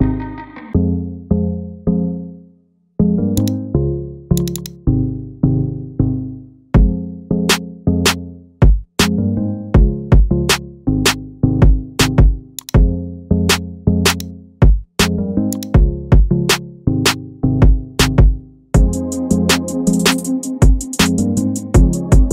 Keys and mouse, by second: 3.4 click, 4.4 click, 4.5-12.7 drag, 10.1 BackSpace, 10.2 BackSpace, 14.2 click, 15.5 click, 17.4 shift+drag, 18.1-18.6 middle drag, 19.1 KP_1.